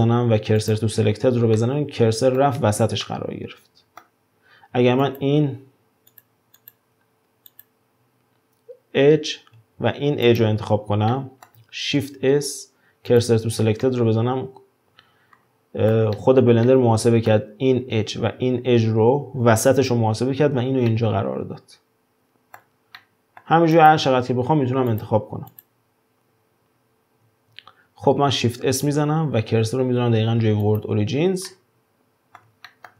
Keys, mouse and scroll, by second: 1.6-5.0 middle drag, 5.0 click, 6.1 click, 6.6 click, 7.5 click, 10.2 shift+click, 11.1 middle click, 12.0 shift+s, 13.8-19.7 middle drag, 20.9-23.7 middle drag, 23.7 click, 24.9 click, 25.5 click, 28.0 scroll down 4, 28.9 shift+s, 31.5-32.9 middle drag.